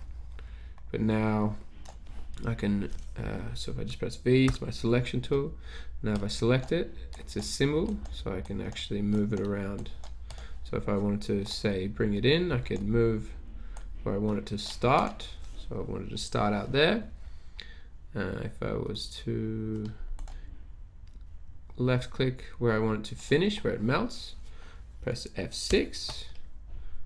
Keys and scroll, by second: 4.5 v, 25.8 F6.